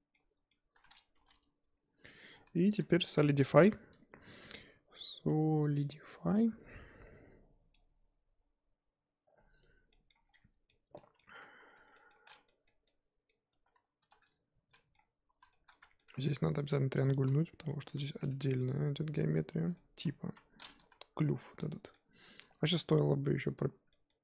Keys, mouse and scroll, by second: 0.1 z, 0.5 middle click, 1.1 g, 2.3-2.7 scroll down 6, 2.4 Tab, 2.8 shift+middle drag, 3.1-3.9 scroll up 3, 5.9-9.9 drag, 9.9 middle click, 10.3-10.6 scroll down 4, 10.8-11.8 middle drag, 11.8 click, 12.0 middle drag, 12.2-12.5 scroll up 1, 12.5-13.5 middle drag, 13.5 Tab, 14.0 2, 14.3 click, 14.7 z, 14.7 middle drag, 14.9-15.4 scroll up 3, 15.4 z, 15.5-16.1 shift+middle drag, 16.1 1, 16.5 click, 17.1 shift+click, 17.9 j, 18.3 Tab, 18.6-20.2 middle drag, 20.2 KP_1, 20.9 z, 21.6-22.2 middle drag, 22.2 z, 23.7 Tab, 23.9-24.2 middle drag.